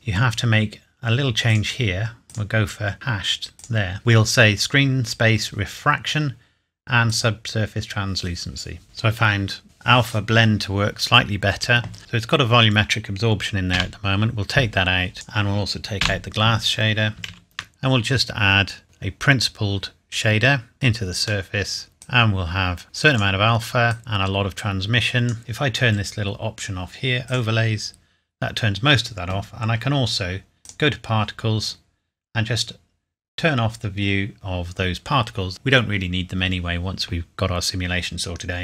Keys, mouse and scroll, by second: 0.7-1.5 scroll up 1, 1.5 click, 7.1 click, 7.6 click, 9.6 click, 10.9-11.5 scroll up 1, 12.0 click, 13.7 Delete, 15.1 click, 16.0 Delete, 17.3 shift+a, 20.7 click, 21.5 middle click, 22.0 click, 27.2 click, 30.6 click, 34.3 click.